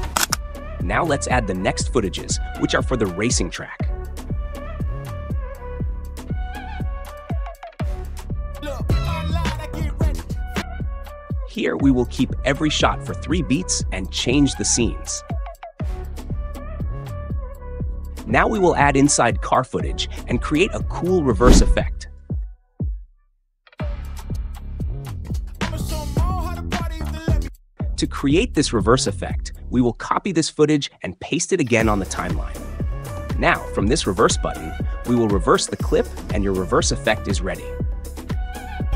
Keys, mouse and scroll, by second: 0.3 drag, 0.6 click, 1.6 click, 4.0-5.0 drag, 6.9-7.9 drag, 8.1 click, 8.5 space, 10.6 space, 14.0-15.0 drag, 15.1 click, 15.8 ctrl+b, 16.3 click, 17.4 drag, 17.7 space, 18.2 click, 18.5 click, 18.7 ctrl+b, 19.0 Delete, 19.6 click, 20.3 click, 21.7 click, 22.3 click, 23.3 click, 24.2 space, 25.2 space, 27.4 space, 28.1 click, 28.4 ctrl+b, 28.6 Delete, 28.8 click, 29.8 ctrl+c, 30.1 ctrl+v, 32.0-33.0 drag, 34.8 click, 36.9-37.9 drag, 38.4 click, 38.8 space.